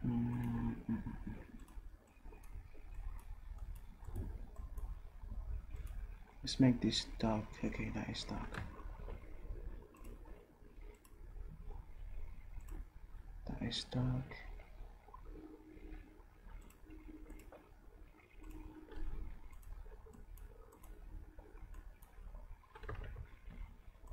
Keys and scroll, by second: 9.4 v, 23.1 ctrl+z.